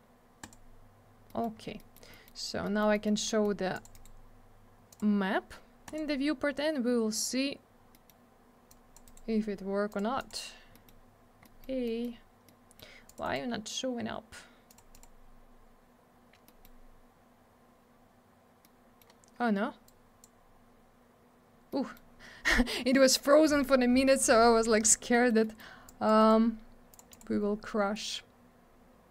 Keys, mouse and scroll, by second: 0.4 click, 0.5 click, 1.3 middle click, 1.4 middle click, 1.5 scroll down 1, 1.8 middle click, 1.9 middle click, 2.1 middle click, 2.2 middle click, 2.6 middle click, 2.8 middle click, 2.9 middle click, 3.0 middle click, 3.3 middle click, 3.4 double middle click, 3.7 click, 3.8 click, 3.9 right click, 4.0 double right click, 4.9 click, 5.0 click, 5.9 click, 5.9 click, 7.9 middle click, 8.1 middle click, 8.7 click, 9.0 right click, 9.2 right click, 9.9 click, 10.0 click, 10.2 click, 10.3 click, 10.7 middle click, 10.9 middle click, 11.4 middle click, 11.6 middle click, 11.8 middle click, 12.0 double middle click, 12.5 middle click, 13.1 click, 13.1 click, 13.2 right click, 13.3 double right click, 14.7 click, 14.7 click, 14.9 click, 15.0 double click, 16.4 middle click, 16.6 middle click, 18.6 middle click, 19.8 click, 21.7 middle click, 25.1 middle click, 25.3 middle click, 25.4 middle click, 25.6 double middle click, 25.9 click, 26.2 right click, 26.3 right click, 26.9 click, 27.0 click, 27.1 click, 27.2 click.